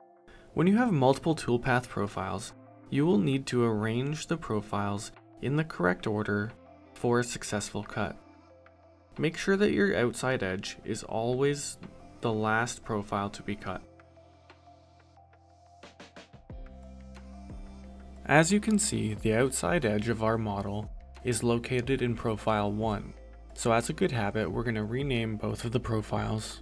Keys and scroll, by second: 22.4-26.0 typing.